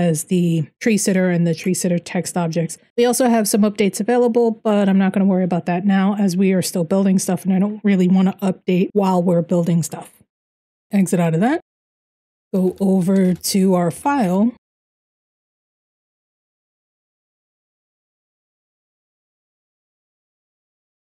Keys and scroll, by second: 10.3 q, 11.5 ctrl+n, 11.9-21.0 typing, 13.6 Return, 16.2 Return.